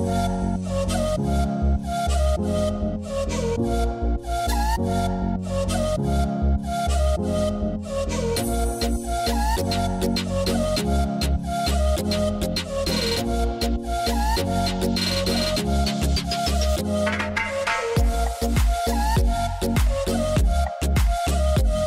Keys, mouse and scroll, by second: 6.0-13.1 drag, 16.4 click, 19.0-19.9 scroll up 4, 19.9-20.7 scroll down 1, 20.7-21.8 middle drag.